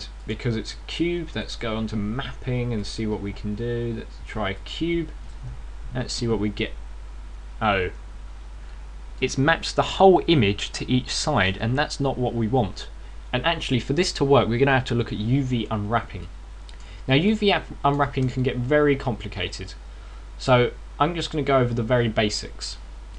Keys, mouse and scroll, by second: 1.0 click, 2.2 click, 2.5-2.9 scroll down 6, 3.5 click, 15.4 Escape, 17.1 middle click, 18.1 middle click, 19.2 shift+middle click, 20.4 scroll up 5, 21.0 scroll down 2.